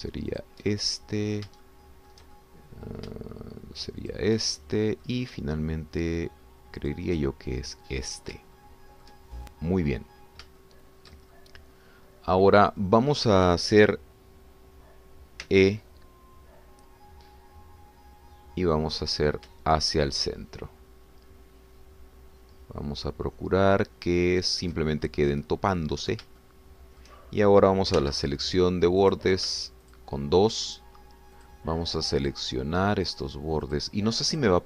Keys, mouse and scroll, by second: 1.3 shift+click, 1.7 shift+click, 2.6 shift+middle click, 3.4 shift+middle click, 3.7 click, 5.0 shift+click, 5.4 shift+middle click, 7.9 shift+click, 8.4 shift+scroll down 1, 8.7 middle click, 9.6 shift+click, 11.0-11.3 scroll down 1, 11.6 shift+click, 12.4-16.4 shift+drag, 16.4 e, 25.4 shift+click, 26.1-26.7 shift+scroll up 1, 27.0 scroll up 1, 27.4-28.6 shift+drag, 29.0 2, 30.2 click, 30.9 shift+click, 31.7 shift+click, 32.4 shift+click, 33.4 shift+click, 34.2 shift+click.